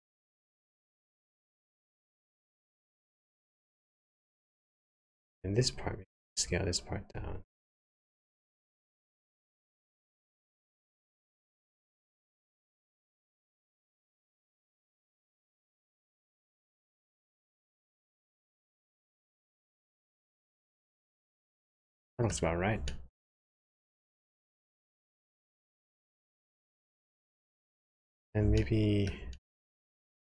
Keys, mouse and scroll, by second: 4.1 middle click, 4.8 shift+middle click, 8.0 click, 8.6 alt+click, 9.9 s, 20.4 middle click, 23.0 shift+middle click, 25.0 middle click, 27.5 shift+middle click, 27.9-28.3 scroll up 3, 28.5 shift+middle click, 29.4 middle click.